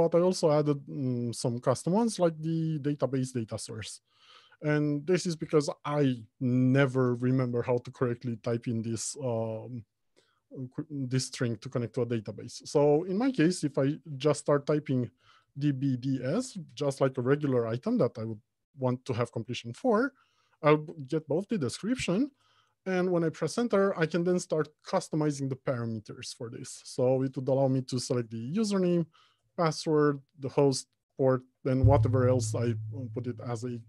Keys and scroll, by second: 22.8 Return.